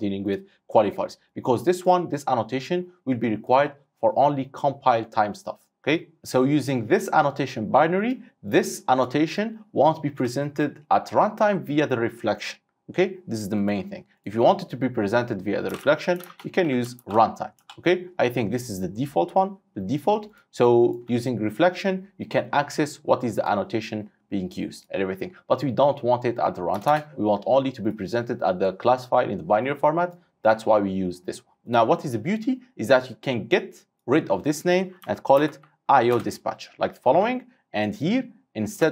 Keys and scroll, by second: 3.5 ctrl+F8, 16.4 ctrl+space, 21.6 Tab, 27.0 space, 27.1 Tab, 36.2 Return.